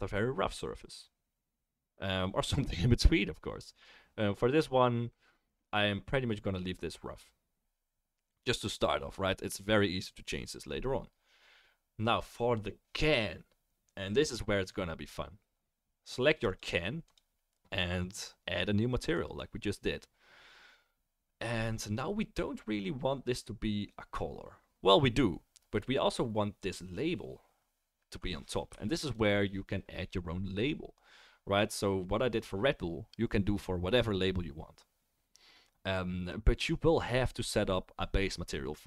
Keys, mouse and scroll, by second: 16.5 click, 17.0 click, 19.2 click, 28.8-38.8 shift+middle drag.